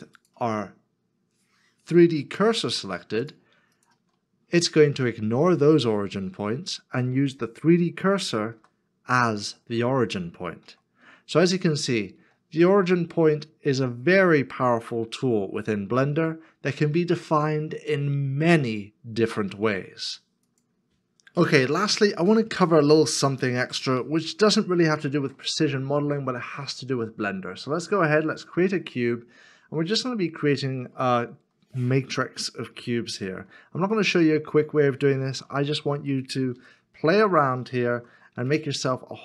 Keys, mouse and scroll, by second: 3.8 Return, 3.8 shift+click, 8.6 r, 10.6 r, 12.1 z, 13.8 x, 25.1 shift+a, 29.5-29.8 scroll down 1, 30.2 shift+middle click, 33.9 shift+middle click, 35.3 shift+d, 36.5 y, 38.0 2, 38.5 Return.